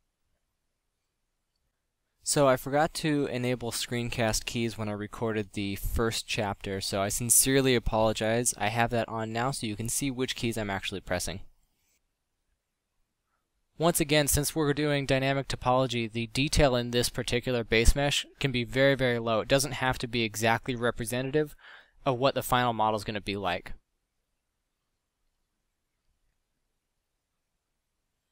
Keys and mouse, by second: 1.2 middle click, 1.6 g, 2.4 ctrl+KP_Add, 2.7 r, 3.1 g, 3.8 s, 5.5-7.8 typing, 9.0 ctrl+Tab, 9.2 a, 9.4 b, 10.0 click, 10.5-15.1 typing, 16.6-22.9 typing, 24.1 s, 27.1 Tab, 27.5 KP_5, 27.8 z.